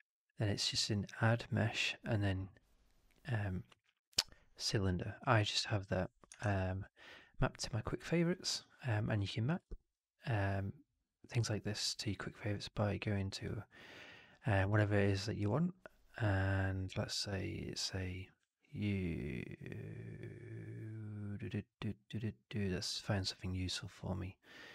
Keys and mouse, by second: 0.5 click, 6.3 shift+Tab, 9.5 shift+Tab, 13.3 click.